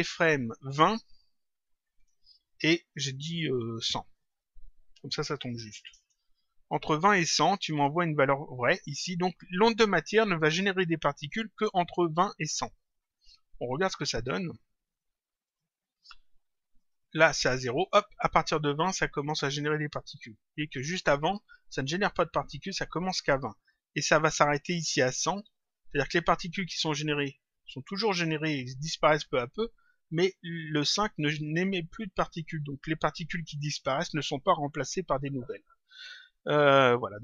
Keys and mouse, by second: 0.2 click, 4.0 click, 7.0 click, 13.5 click, 15.4 click, 16.7 click, 20.6 click.